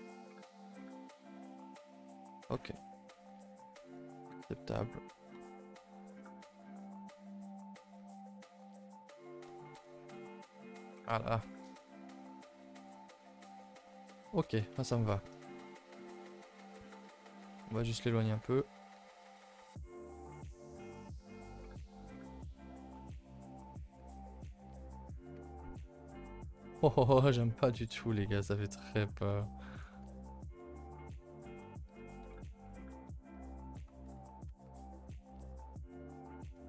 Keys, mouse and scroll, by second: 1.5 click, 6.1 click, 7.2 click, 9.8 KP_0, 13.3 scroll down 1, 14.5 click, 14.9 middle click, 15.1-15.7 scroll up 3, 15.7 shift+middle click, 16.0 scroll up 5, 16.1 a, 16.2 a, 16.3 middle click, 16.5 3, 16.9 click, 17.2 middle click, 17.3 shift+middle click, 17.8 scroll up 4, 18.0-20.5 middle drag, 20.5 g, 21.9 click, 22.3 g, 22.9-24.2 middle drag, 24.2 s, 25.1 click, 25.3 Tab, 25.6 scroll down 2, 25.8 middle click, 26.8-27.4 scroll down 7, 27.4-28.7 middle drag, 28.7 click, 29.0 scroll up 5, 29.2 Tab, 29.4 middle click, 30.0 g, 31.6 middle click, 32.2 s, 33.3 click.